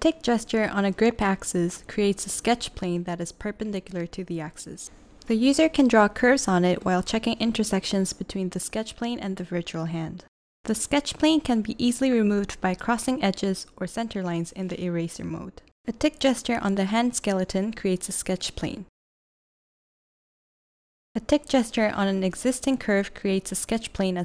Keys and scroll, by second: 0.9 v, 2.3 v, 9.3 v, 12.2 e, 13.8 v, 16.6 v, 20.4-21.2 typing, 22.3 v.